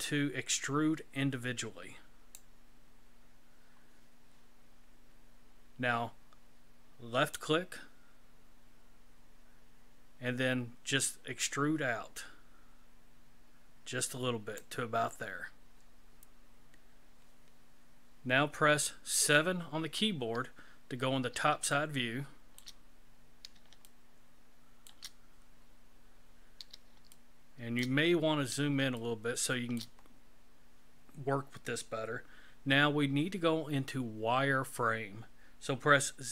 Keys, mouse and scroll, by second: 7.3 click, 19.1 KP_7, 21.7 shift+middle click, 23.0-23.5 scroll down 3, 23.9 shift+middle click, 26.4 scroll up 2, 27.1 shift+middle click, 28.1 scroll up 3, 29.0 shift+middle click, 30.2 scroll up 1.